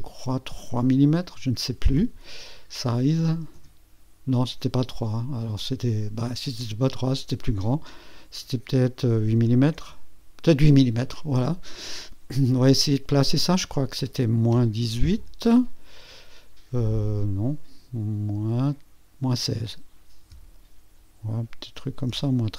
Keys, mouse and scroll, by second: 2.8 KP_3, 6.8 click, 9.4 KP_8, 9.8 KP_Enter, 13.4 click, 14.5 KP_Subtract, 14.9 KP_1, 15.2 KP_8, 18.3 BackSpace, 20.3 KP_6, 22.1 BackSpace.